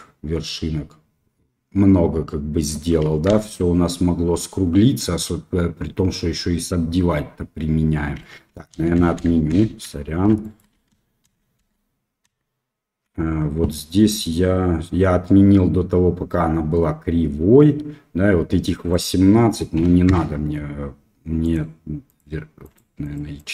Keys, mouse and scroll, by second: 3.2 ctrl+z, 8.7-13.0 ctrl+z, 10.4 shift+drag, 19.0-20.7 drag, 22.6 click, 23.0 click.